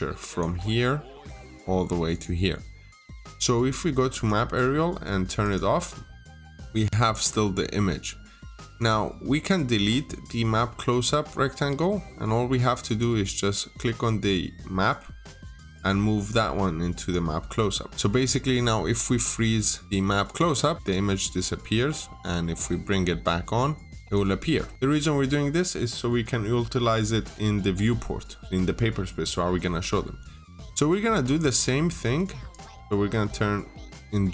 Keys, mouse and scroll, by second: 6.3 scroll up 1, 6.6-7.5 scroll down 1, 7.5-8.1 scroll up 1, 8.6 click, 11.3 Delete, 12.7 click, 17.7 Escape, 20.1 click, 21.0 middle click, 23.9 click, 24.7 scroll down 1, 24.8 middle click, 25.2-25.6 scroll up 1, 25.6 middle click, 29.5 scroll down 1, 29.6 middle click, 30.2 scroll down 1, 30.9 middle click, 32.3 click.